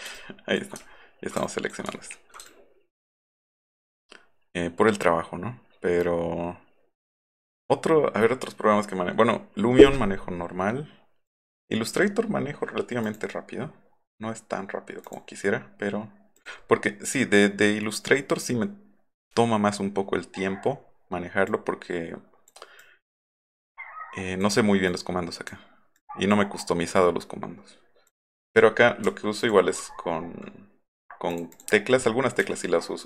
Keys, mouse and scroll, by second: 0.9 alt+scroll up 1, 1.4 ctrl+click, 1.9 alt+scroll up 1, 2.5-7.6 ctrl+drag, 11.3 click, 13.1 click, 15.0 click, 16.4 click, 21.5-22.5 drag, 22.8-24.4 drag, 24.9-25.5 drag, 26.0-26.3 drag, 27.0-28.1 drag, 29.4 click, 29.8 alt+middle click, 30.1 alt+middle click, 31.3 click, 31.5 click, 32.4 v.